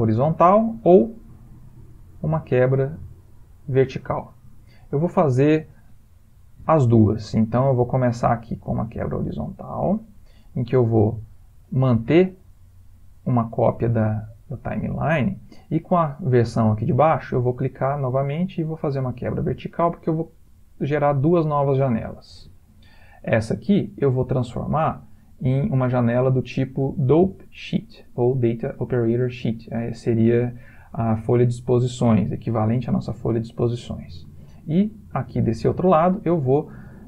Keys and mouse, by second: 1.8 right click, 9.1 right click, 17.3 right click, 23.1 click, 36.0 click.